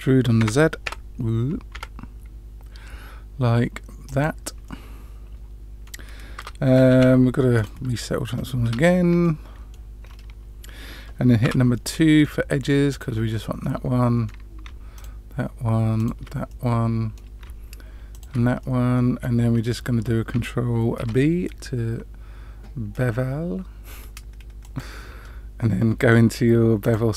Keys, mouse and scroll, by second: 0.4 e, 4.6-5.8 middle drag, 6.3 Tab, 6.9 ctrl+a, 8.6 Tab, 9.2 middle click, 10.0-11.4 scroll up 2, 11.4 scroll up 1, 11.4 2, 11.9 middle click, 12.9 click, 13.6 middle click, 14.9 shift+click, 15.9 shift+click, 16.4 middle click, 18.1 shift+click, 18.6 middle click, 19.5-20.3 scroll down 1, 21.3 ctrl+b, 26.8 click.